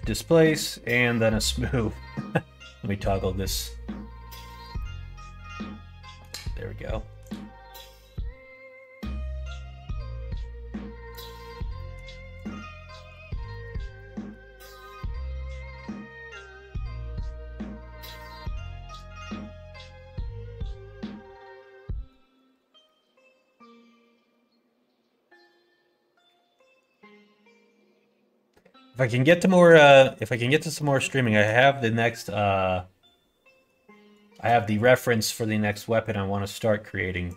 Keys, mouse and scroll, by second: 4.7-6.2 middle drag, 7.2-9.8 drag, 11.1 click, 11.7 middle click, 12.9 middle click, 13.4 middle click, 13.9 middle click, 18.8 click, 22.0 middle click, 22.8 middle click, 25.4 click, 26.9-28.5 middle drag, 28.8 middle click, 29.4 middle click, 29.8 middle click, 30.2 middle click, 30.7 middle click, 31.1 shift+middle click, 31.5 middle click, 37.2 click.